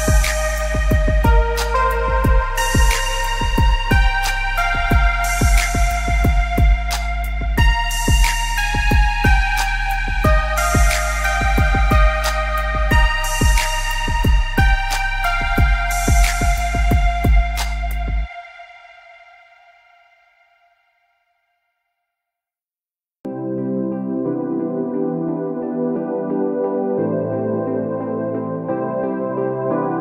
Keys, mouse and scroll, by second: 8.0 click, 15.9 scroll, 17.1 click, 20.4 right click, 21.6 click, 24.5-26.4 scroll down 1, 26.6 click.